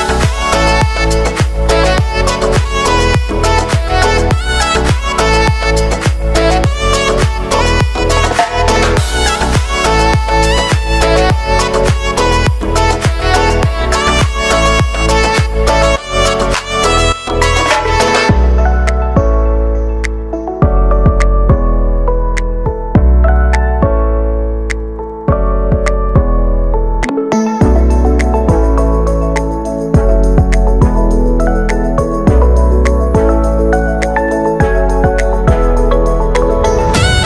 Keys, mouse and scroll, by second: 0.4 click, 1.1 space, 2.9 [, 3.3 click, 4.3 space, 7.9 space, 9.3-11.8 drag, 14.0 `, 15.2 click, 17.0 ctrl+alt+y, 18.7 click, 19.0 ctrl+a, 19.3-20.5 typing, 21.0-30.6 drag, 30.6 space, 32.2-33.9 drag, 33.9 `, 36.6 click.